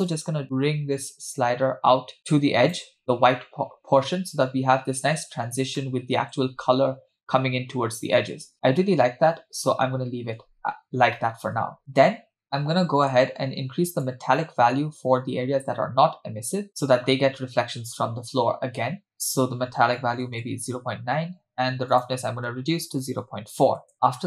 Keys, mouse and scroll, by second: 0.1-2.8 drag, 4.5-5.2 scroll up 2, 5.2-5.6 scroll up 3, 5.9-6.3 shift+middle drag, 8.4-9.0 scroll down 3, 9.4-10.5 shift+middle drag, 10.5-11.1 scroll down 2, 11.2 shift+middle click, 12.4 middle click, 14.1-16.9 drag, 19.2-20.7 drag, 21.9-23.9 drag, 23.9 middle click.